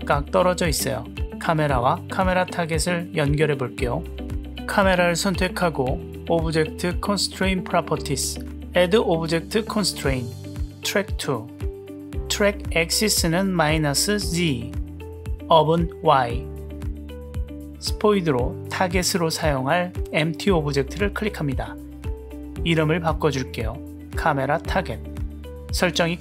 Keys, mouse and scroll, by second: 0.3 g, 2.3 click, 2.8 g, 9.0-11.9 drag, 18.5 click, 23.6-25.1 drag.